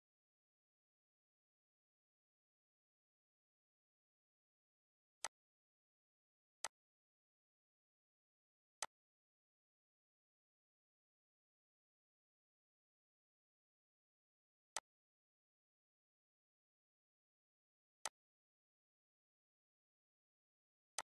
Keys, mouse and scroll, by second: 0.8 middle click, 1.7 scroll down 1, 4.2 click, 4.8 scroll up 1, 5.5-13.1 drag, 13.7 click, 14.3 scroll down 1, 17.0-18.9 drag, 18.9 scroll up 1, 19.9-21.1 drag.